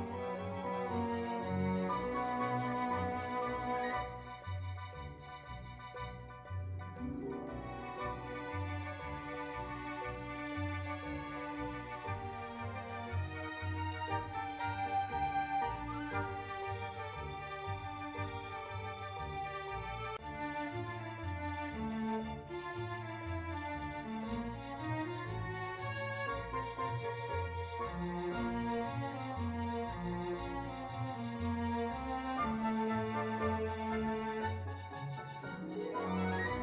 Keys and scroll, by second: 13.9 ctrl+w, 15.7 ctrl+w, 17.3 ctrl+w, 22.8 ctrl+w.